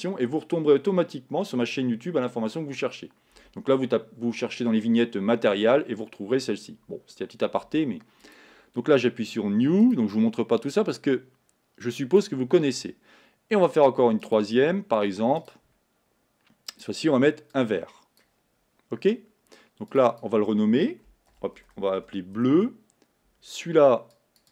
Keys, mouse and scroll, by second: 0.0-9.2 drag, 14.4-17.6 drag, 20.1-24.5 drag.